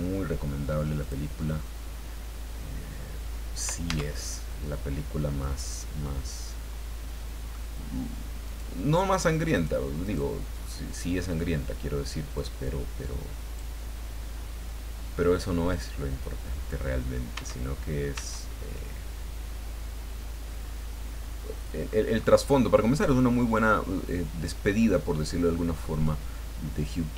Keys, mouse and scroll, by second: 1.0 click, 3.9 Tab, 4.9 middle click, 6.0-7.7 middle drag, 8.4 right click, 9.1 right click, 9.5 right click, 10.0 right click, 10.6 middle click, 12.3-13.7 drag, 13.8 scroll down 2, 14.4-14.7 scroll down 2, 15.2 scroll up 2, 15.6-15.9 scroll down 2, 16.9 scroll down 2, 17.3 Tab, 18.1 Tab, 18.7 click, 18.8-22.1 middle drag, 22.2-22.6 scroll up 2, 23.5-26.2 middle drag, 26.8 click.